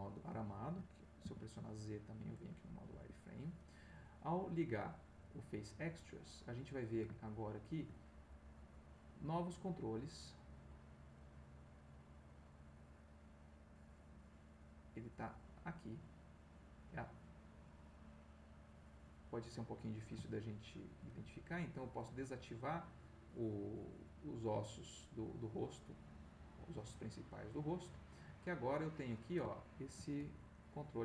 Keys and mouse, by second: 0.3 shift+middle click, 1.2 z, 2.9 Escape, 5.8 click, 7.2 ctrl+middle click, 8.5 click, 9.3 click, 10.1-13.8 middle drag, 13.8-15.0 drag, 17.6 middle click, 19.0 click, 20.8 shift+middle click, 24.6-27.7 middle drag, 28.8 click, 29.5 ctrl+middle click, 30.5 ctrl+g.